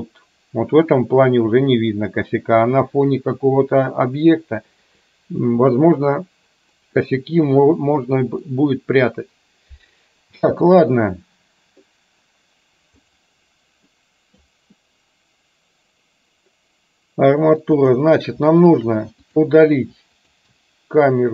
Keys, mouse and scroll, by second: 7.1-8.7 middle drag, 10.6 space, 13.2 drag, 13.9-14.7 middle drag, 17.8 click, 19.3 drag, 20.3 shift+click.